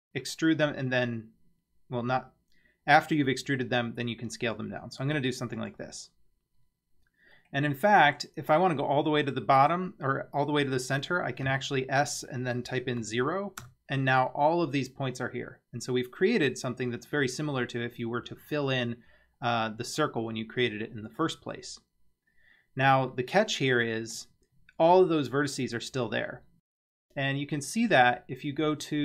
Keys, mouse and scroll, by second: 6.7-7.0 scroll up 2, 7.4 middle click, 8.5 scroll down 3, 8.7 scroll up 1, 9.2-9.8 middle drag, 11.5 s, 22.3-22.8 scroll up 1, 23.1-24.3 shift+middle drag, 24.5-25.0 scroll up 3.